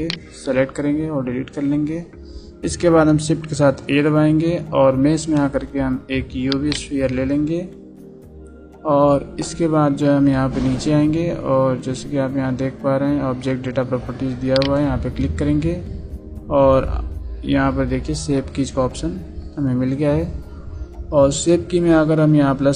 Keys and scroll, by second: 1.0 Delete.